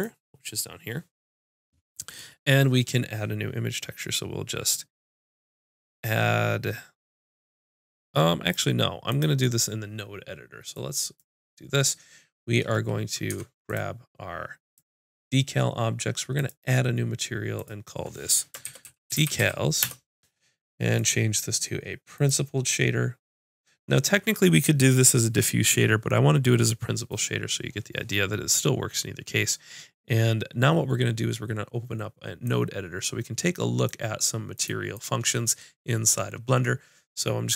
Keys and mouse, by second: 9.1-13.3 drag, 13.3 Tab, 13.7-23.9 drag, 32.4 click, 32.8 click, 33.5 click, 34.5 click.